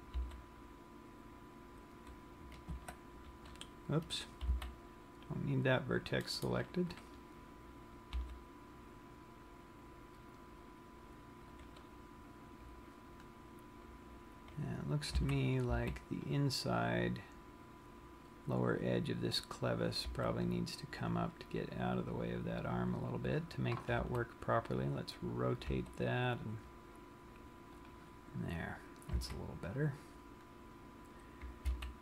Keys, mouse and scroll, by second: 1.0 g, 3.9-4.8 scroll up 6, 4.8 c, 7.8 right click, 7.8 scroll down 1, 8.7 g, 12.4 click, 12.6 scroll down 1, 13.8-15.2 scroll up 5, 15.8 a, 16.0 c, 20.3 right click, 20.7 g, 23.5 click, 24.6 r, 26.1 click, 26.1 g, 28.7 click, 28.8 scroll down 1, 29.8 a, 30.7-31.4 scroll up 1.